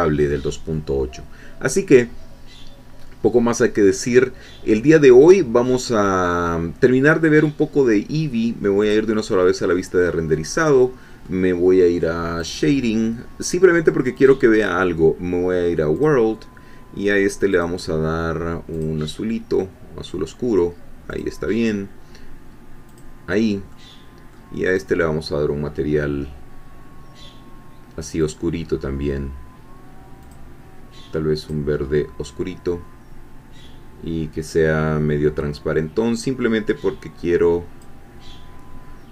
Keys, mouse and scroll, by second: 3.0 scroll down 2, 3.8-4.6 scroll up 2, 4.6-4.9 scroll down 2, 8.9 click, 10.3-11.7 middle drag, 12.4-12.9 drag, 14.2 click, 16.0-17.2 drag, 17.5 click, 18.7-19.5 drag, 21.1 click, 21.5 middle click, 22.9 click, 23.7 middle click, 24.7 click, 28.2 click, 30.2 click, 31.4 click, 31.8 scroll down 1, 32.4-32.7 scroll down 1, 34.6-35.2 scroll down 3, 36.2-38.0 drag.